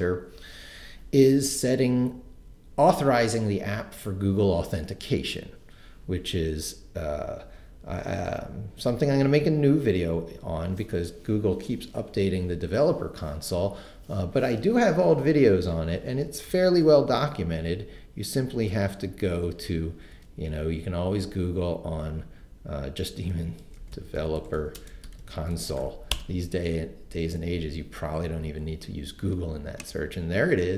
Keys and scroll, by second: 18.5 super+t, 22.9-26.3 typing.